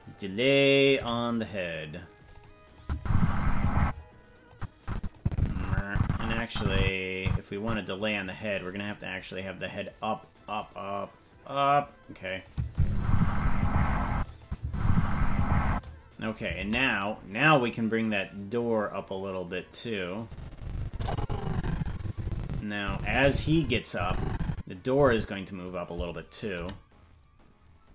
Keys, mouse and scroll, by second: 0.9 g, 2.8-3.9 drag, 2.9 space, 3.8 space, 4.5 click, 5.1-8.0 drag, 8.8-11.8 drag, 12.5-14.0 drag, 12.6 space, 14.1 space, 14.4-15.8 drag, 14.6 space, 15.7 space, 16.6 ctrl+Tab, 17.0-20.2 right drag, 20.2-25.7 drag, 26.6 i.